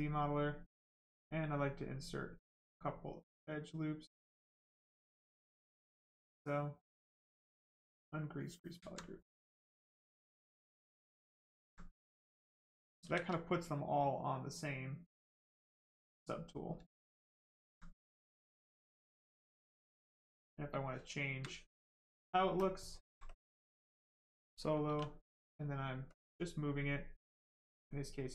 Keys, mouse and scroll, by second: 0.8 click, 5.1 right click, 8.2 click, 8.8 alt+right click, 10.6 right click, 11.6 alt+right click, 12.7 shift+right click, 13.1 shift+f, 13.5 right click, 15.6 ctrl+click, 16.4 right click, 18.6 click, 19.5 ctrl+click, 19.7 ctrl+click, 24.9 w, 26.1 click.